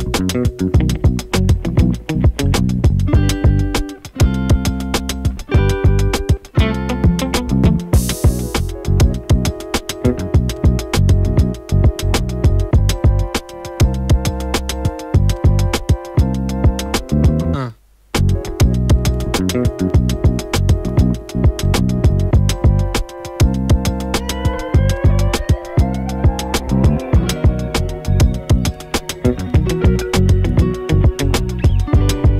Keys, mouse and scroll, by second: 6.2-7.3 typing, 8.5 click, 14.0 u, 15.6 click, 16.8 ctrl+c, 17.5 click, 19.5 p, 20.1 click, 22.4 space, 24.7 space, 26.8-32.3 drag.